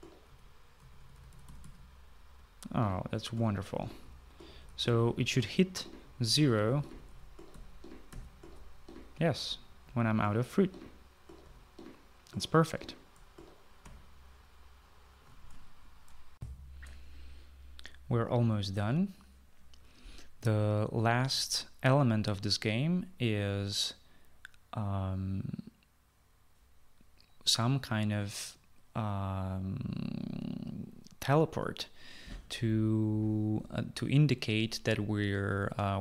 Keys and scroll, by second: 0.0-7.8 typing, 9.4 typing, 11.0-14.7 typing, 14.8 Escape, 17.4 shift+F9, 17.4 shift+F9.